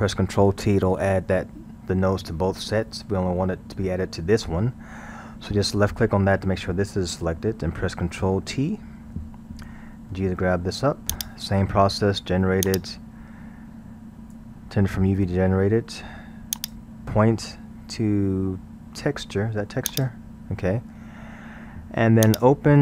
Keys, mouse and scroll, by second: 9.0 ctrl+t, 10.1 g, 12.7-15.7 drag, 16.6-19.5 drag, 22.2 click.